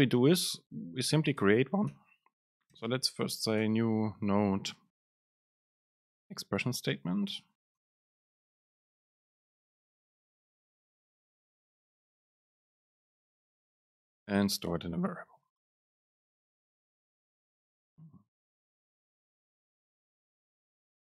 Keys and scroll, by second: 1.4 ctrl+shift+super+Left, 1.5 BackSpace, 3.9 super+space, 6.6 BackSpace, 7.6 Right, 8.9 BackSpace, 12.5 super+space, 13.1 Right, 14.1 shift+Left, 16.4 shift+Left, 16.5 alt+super+v, 21.0 Down.